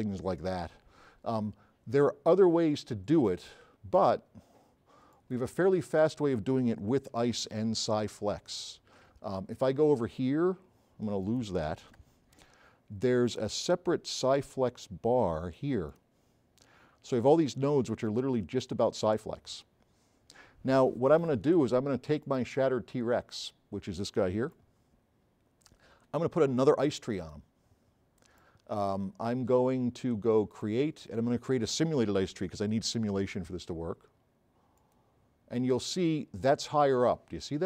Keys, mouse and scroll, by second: 2.6 click, 11.3 click, 12.0 BackSpace, 22.3 click, 24.5 right click, 24.5 s, 27.5-28.5 right drag, 30.5 click, 34.8 click.